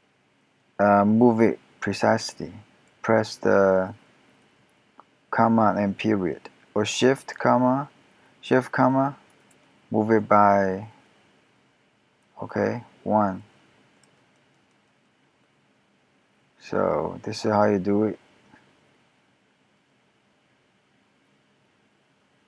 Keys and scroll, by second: 1.4 ., 3.0 ., 3.7 ., 4.0 ., 4.5 ,, 7.4 shift+., 9.0 shift+., 12.7 shift+., 13.5 shift+,, 14.4 ., 14.6 ..